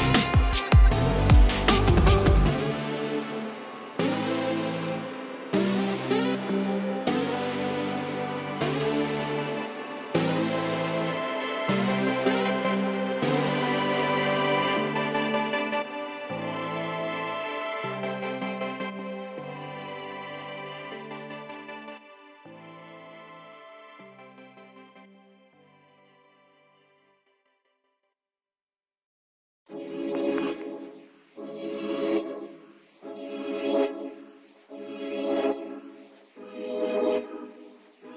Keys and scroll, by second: 0.9 alt+space, 1.8 alt+space, 3.5 ], 4.0 [, 5.5 [, 5.6 [, 5.8 [, 7.0 [, 8.6 ], 9.3 ], 10.5 [, 11.0 [, 12.7 [, 13.8 [, 14.9 ], 16.1 [, 16.2 [, 18.5-19.1 typing, 20.8 ], 22.7 space, 24.7-25.6 typing, 26.8 space, 27.2 space, 30.3 space, 31.2-31.9 [, 32.0 [, 32.1 [, 33.9 [, 34.5 ].